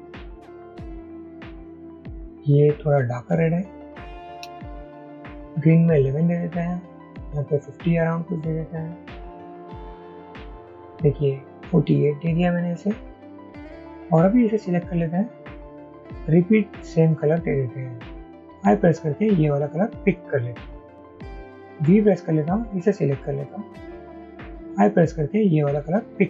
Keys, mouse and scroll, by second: 0.7 shift+Down, 0.9 shift+Down, 1.2 shift+Down, 1.4 Up, 1.6 Up, 1.7 Up, 4.4 shift+Up, 7.2 shift+Up, 7.7 shift+Up, 7.8 shift+Up, 8.0 shift+Up, 8.4 shift+Up, 8.8 shift+Down, 11.6 Down, 19.4 typing, 22.5-23.3 typing.